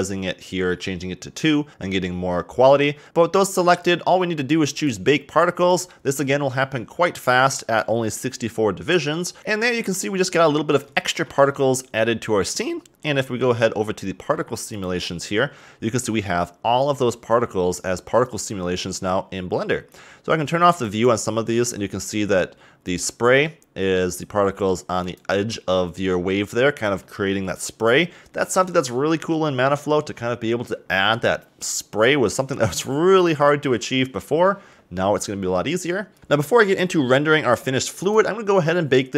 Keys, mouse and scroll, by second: 4.8 click, 8.2-9.4 drag, 10.0-10.5 scroll up 1, 10.6-11.0 scroll up 1, 11.0-12.8 shift+middle drag, 12.8-13.3 scroll down 3, 14.7 click, 18.2-21.1 drag, 22.2 scroll up 1, 23.0 click, 23.4-25.2 middle drag, 25.2 click, 27.0 click, 38.0 click.